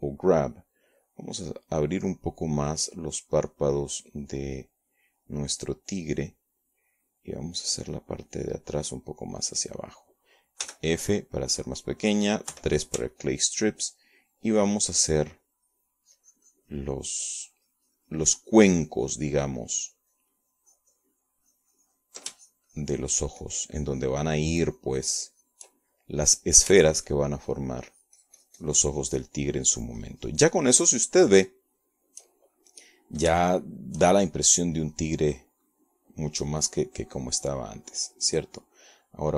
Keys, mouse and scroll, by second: 1.5 f, 2.2 click, 3.1-4.2 drag, 4.9-6.2 drag, 8.4 click, 9.0 click, 10.2 click, 11.1 click, 12.5 f, 13.3 click, 14.4 3, 15.0-24.0 ctrl+drag, 24.2-27.6 ctrl+shift+drag, 27.8 shift+middle click, 28.7-31.3 shift+drag, 31.6 shift+click, 32.5-34.0 shift+drag, 35.3 shift+click, 36.5-39.3 drag.